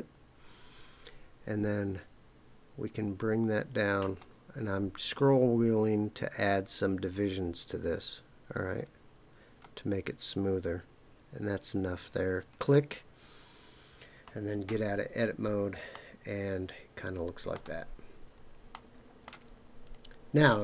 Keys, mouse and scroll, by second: 4.0-8.5 scroll up 1, 8.9-9.6 scroll up 1, 9.6-12.4 scroll up 1, 12.4 click, 14.7 Tab, 15.9-17.6 middle drag, 17.8-18.3 scroll down 3, 18.7-19.3 middle drag, 19.8 click.